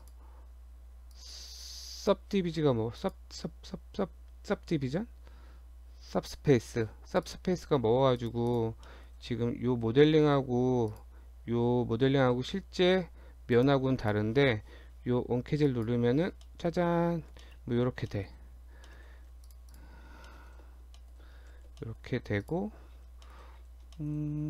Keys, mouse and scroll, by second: 0.0 click, 1.0 Tab, 1.2 click, 1.4 Tab, 3.0 click, 7.3 click, 7.8 Tab, 8.2 click, 8.5 click, 8.9 middle click, 9.3 Tab, 9.7 scroll up 1, 10.1 middle click, 10.9 click, 12.2 g, 14.1 click, 15.7 click, 16.5 middle click, 17.1-18.2 scroll down 6, 17.5 shift+middle click, 18.2 shift+middle click, 18.6 scroll up 1, 18.9 shift+middle click, 19.0 shift+scroll down 1, 19.4 Tab, 19.5 click, 19.7 click, 20.1 scroll down 1, 20.3 shift+middle click, 21.2 shift+middle click, 21.6 shift+d, 22.8 Tab, 23.0-23.8 scroll up 5, 23.3 shift+middle click, 24.0 shift+middle click.